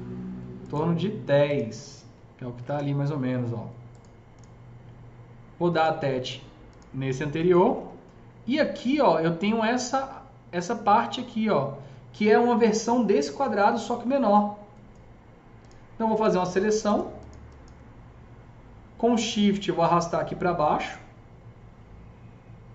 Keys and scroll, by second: 2.5 Return, 2.5 KP_1, 2.5 KP_0.